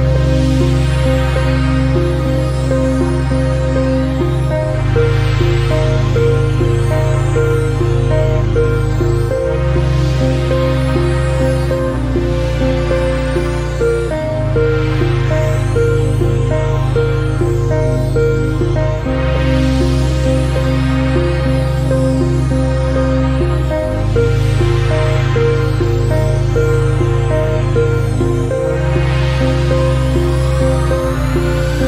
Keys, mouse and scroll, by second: 0.1 alt+shift+right click, 0.8 click, 1.3 t, 1.6 click, 2.8 click, 3.3 middle click, 3.6 scroll down 1, 3.8 middle click, 4.5 alt+shift+right click, 4.9 click, 5.7 click, 5.9 middle click, 6.7 scroll up 1, 7.0 a, 7.2 middle click, 7.5 ctrl+z, 7.7 ctrl+z, 8.1 a, 8.2 middle click, 8.4 scroll up 1, 8.5 scroll down 4, 8.7 alt+shift+right click, 9.0 shift+middle click, 9.4 click, 10.1 click, 10.3-10.7 scroll up 2, 10.7 middle click, 11.7 click, 11.8-12.2 scroll down 2, 12.2 scroll up 1, 12.5 a, 12.5 scroll down 3, 12.7 middle click, 12.9 scroll up 1, 13.1 middle click, 14.1 alt+shift+right click, 14.5 click, 15.3 click, 15.9 a, 16.0 middle click, 16.2 scroll up 1, 16.4 alt+shift+right click, 16.7 a, 17.0 middle click, 17.4 z, 18.3 right click, 18.9 click, 19.2-22.1 typing, 19.6 middle click, 20.1 right click, 20.7 right click, 21.2 middle click, 21.5 right click, 22.4 alt+shift+right click, 22.6 middle click, 23.5 right click, 24.0 g, 31.2 scroll up 1, 31.4 middle click.